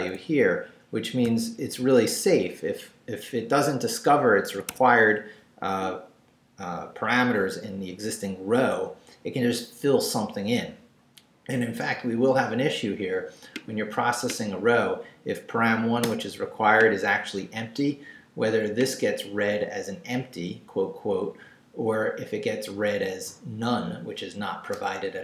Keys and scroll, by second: 0.0 Right, 1.2 v, 1.6 Right, 4.5 Escape, 16.0 BackSpace.